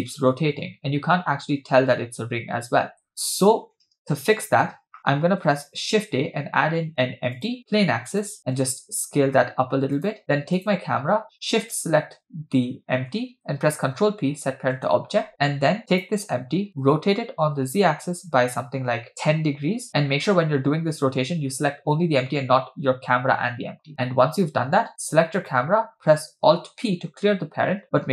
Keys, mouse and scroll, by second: 2.8 space, 5.9 shift+a, 8.6 s, 10.6 click, 11.7-12.8 shift+drag, 13.9 ctrl+p, 15.9 click, 16.8 r, 25.4 click, 26.7 alt+p.